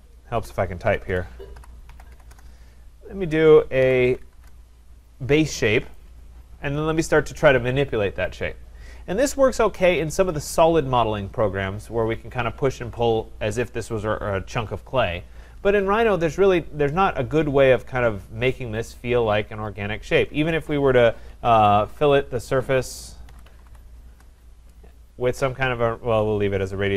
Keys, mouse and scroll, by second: 0.1-5.5 typing, 6.0 right click, 6.5-7.3 scroll, 7.3 scroll, 9.5 click, 10.3 click, 16.8-21.9 middle drag, 21.1-24.1 typing.